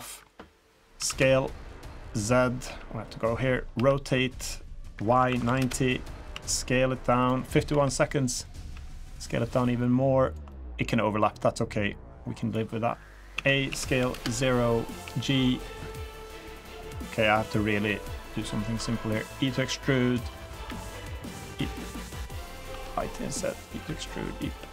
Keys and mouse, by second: 0.9 s, 2.6 KP_1, 3.7 r, 6.3 s, 7.7 KP_3, 8.7 s, 10.5-10.9 drag, 11.6-12.5 drag, 13.3 a, 13.7 s, 15.0 g, 16.1 middle drag, 16.8-17.9 drag, 17.9-18.3 middle drag, 19.0 i, 20.6 e, 22.7 i, 23.8 e, 24.6 s.